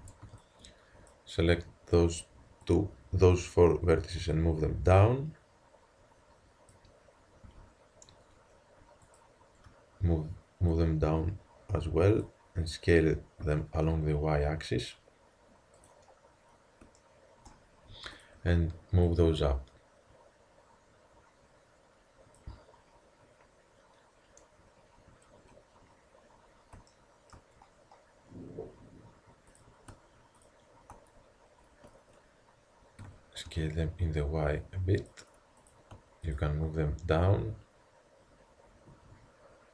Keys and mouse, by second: 0.0 a, 0.3 b, 2.7-4.5 drag, 7.5 a, 9.1-12.6 drag, 13.5 s, 18.1-20.9 drag, 23.8-26.9 middle drag, 29.6-32.4 drag, 33.0 s, 35.7-38.9 drag.